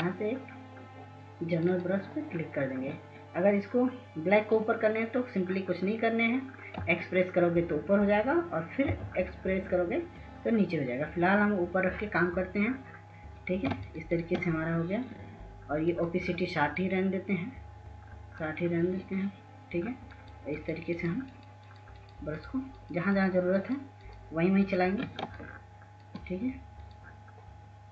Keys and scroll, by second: 7.5 x, 9.6 x, 14.5 ctrl+space, 15.0 ctrl+space, 15.2 ctrl+space.